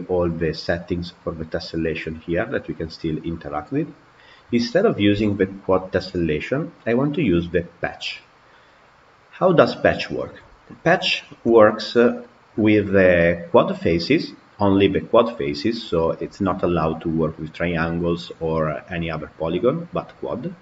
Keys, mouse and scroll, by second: 2.7-3.8 drag, 3.8-6.9 scroll down 3, 10.2 click, 11.3 KP_Decimal, 12.0-15.0 middle drag.